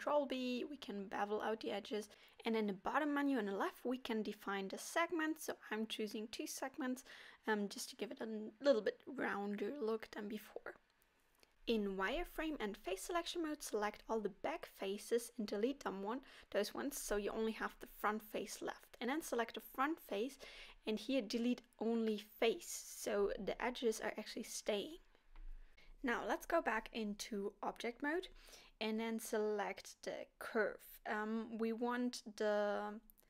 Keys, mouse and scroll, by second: 3.9 click, 3.9 middle click, 5.6 middle click, 5.9 middle click, 6.1 middle click, 6.5 middle click, 7.1 middle click, 8.3 KP_7, 10.4 z, 13.2 click, 13.8 click, 16.7 x, 17.0 middle click, 18.3 middle click, 18.9 click, 22.9 middle click, 22.9 x, 23.8 z, 24.9 middle click, 25.8 click, 27.2 Tab, 28.0 middle click, 29.3 middle click, 30.6 click, 31.0-31.3 scroll up 2, 31.3 middle click.